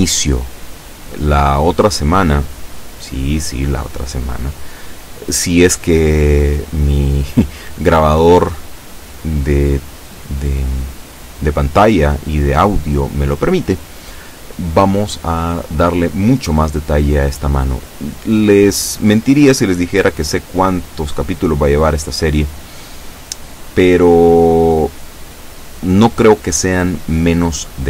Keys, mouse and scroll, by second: 0.3-1.3 drag, 1.3-1.7 scroll up 2, 2.1 scroll down 2, 2.9 scroll down 2, 4.8-6.0 middle drag, 5.8 Tab, 6.1-8.6 middle drag, 8.5 Tab, 9.3-11.5 drag, 11.4 Tab, 11.9-13.9 middle drag, 17.7-19.1 middle drag, 19.1 scroll down 1, 19.5-20.8 middle drag, 21.1 KP_7, 22.3 scroll down 1, 22.9-24.1 shift+middle drag, 24.2 shift+scroll up 2.